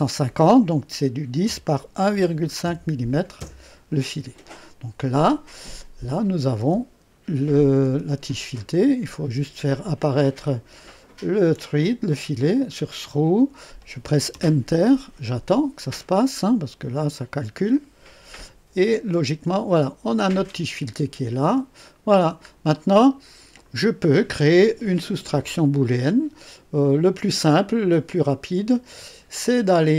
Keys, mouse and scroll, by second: 1.4 KP_1, 2.1 KP_Decimal, 2.6 KP_5, 3.4 KP_Enter, 6.1 click, 6.6 space, 7.8 space, 8.7 click, 10.3 click, 10.9 click, 12.5 click, 14.3 Return, 18.7 click, 19.1 space, 20.0 click, 21.4 space, 22.1 scroll down 2, 22.7 click, 28.0 click.